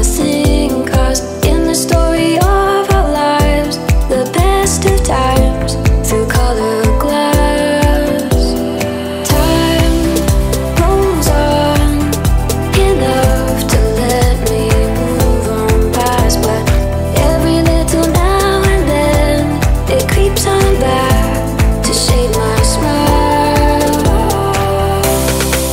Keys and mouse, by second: 2.3 click, 4.7-12.0 drag, 20.1-22.0 right drag, 22.0-23.4 drag, 25.5 click.